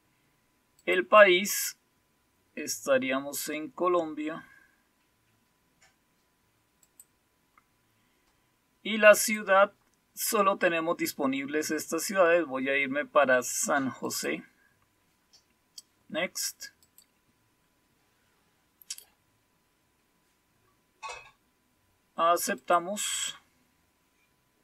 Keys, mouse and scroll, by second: 0.7 click, 2.6-6.8 scroll down 4, 6.8 click, 9.1 click, 11.1-12.8 scroll down 4, 12.8-14.0 scroll down 1, 14.0 click, 16.8 click, 20.1-22.5 scroll down 3, 22.5 click.